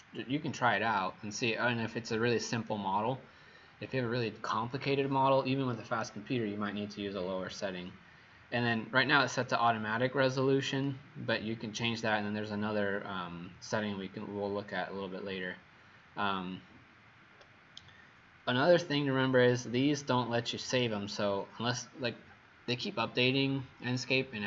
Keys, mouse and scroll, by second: 15.4 scroll down 2.